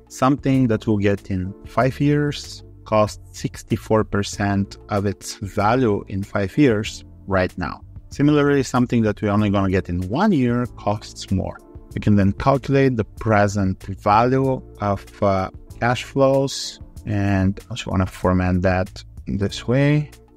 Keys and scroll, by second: 18.0 ctrl+Right, 19.0 alt+4.